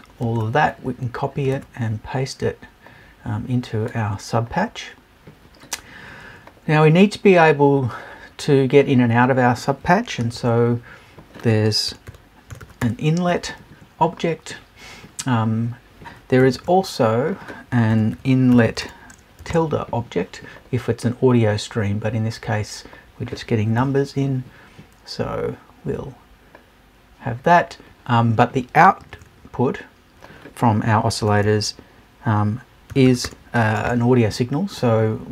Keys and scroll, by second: 23.8 BackSpace.